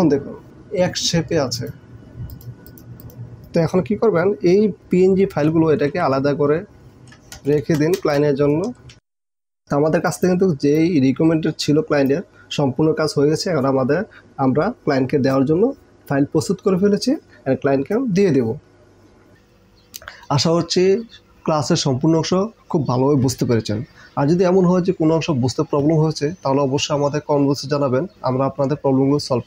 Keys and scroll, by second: 5.9 ctrl+x, 7.1 ctrl+shift+n, 7.7 ctrl+shift+Return, 9.0 ctrl+v.